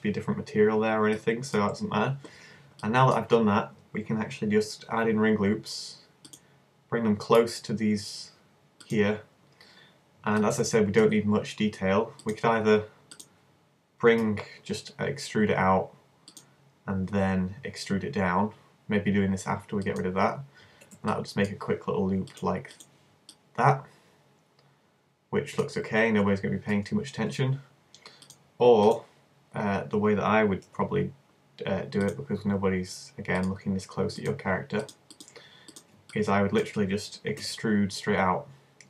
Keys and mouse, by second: 0.0-1.2 drag, 1.2-2.4 middle drag, 4.9 ctrl+r, 8.9-10.8 drag, 10.8-12.2 middle drag, 12.2-16.1 right drag, 14.2 e, 16.4 click, 17.6 e, 18.3 click, 20.0 click, 23.4 click, 24.2-25.2 middle drag, 25.3 middle click, 26.2 super+z, 26.8 super+z, 29.1 click, 30.0 middle click, 30.7 ctrl+r, 33.5-34.8 drag, 34.3 right click, 34.8-36.2 middle drag, 36.2 right click, 36.4 middle click, 37.4 e.